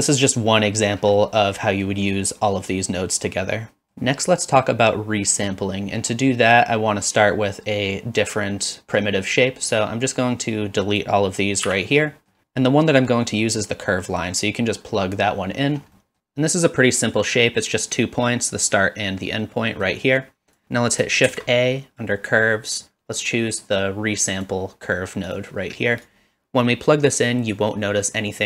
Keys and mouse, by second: 1.7 middle click, 3.8 middle click, 6.4 middle click, 9.8-11.0 drag, 11.7 x, 12.1 middle click, 14.2-15.2 drag, 16.0 middle click, 19.6 middle click, 20.4 click, 21.3 shift+a, 26.2-27.6 drag.